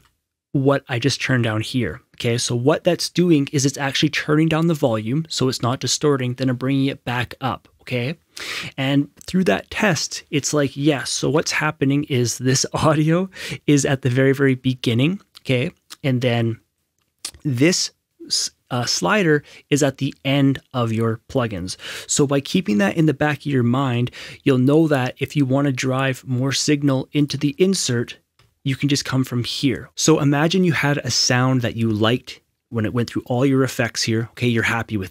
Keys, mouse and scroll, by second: 2.7 F6, 13.3 F6, 24.0 F6, 27.2 F6, 27.2 click, 28.3 F6.